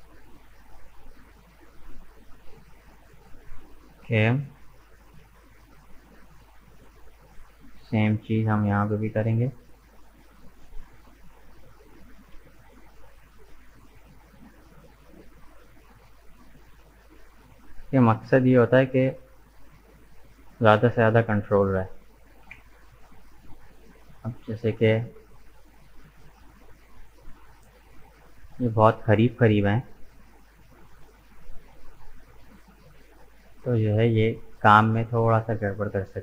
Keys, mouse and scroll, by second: 2.9-3.2 scroll down 1, 3.2-4.4 middle drag, 4.4-5.0 scroll down 2, 5.0-8.0 middle drag, 9.1 shift+right click, 9.7 shift+right click, 10.2 shift+right click, 11.9 shift+right click, 12.4-13.7 shift+middle drag, 13.7 shift+right click, 14.2 shift+right click, 14.9 shift+right click, 15.6 shift+right click, 16.8 shift+right click, 17.2-18.6 middle drag, 18.6 shift+right click, 19.5 shift+right click, 19.9 shift+right click, 20.5 shift+right click, 20.9-22.4 middle drag, 22.4 Delete, 24.4-26.0 middle drag, 26.0-26.3 scroll down 2, 26.3 middle click, 27.2-28.8 scroll up 2, 28.8 alt+right click, 29.7 middle click, 30.3 right click, 31.2-32.5 middle drag, 32.5-32.8 scroll up 2, 32.8-35.9 middle drag.